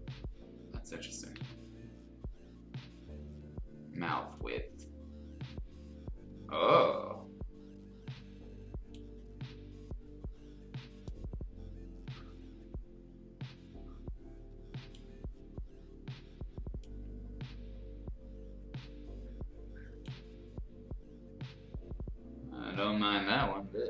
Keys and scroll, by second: 1.3 ctrl+z.